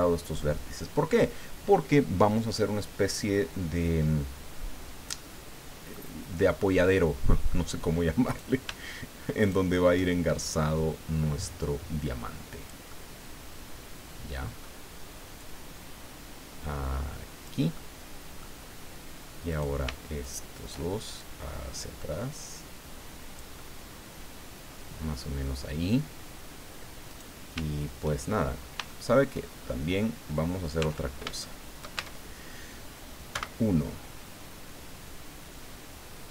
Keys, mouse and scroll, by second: 2.5-6.1 drag, 6.6-7.7 drag, 8.3 right click, 9.4 shift+right click, 10.4-12.8 shift+drag, 12.9-14.8 middle drag, 15.4-17.6 drag, 17.8 middle click, 19.5 right click, 20.2 shift+right click, 21.1-25.6 shift+drag, 23.5-25.6 right drag, 27.1 right click, 28.2-28.8 shift+scroll down 2, 28.9 shift+middle click, 29.6 shift+scroll up 3, 29.9 scroll down 2, 30.8 Tab, 31.4 shift+click, 32.0 shift+Tab, 33.3 1.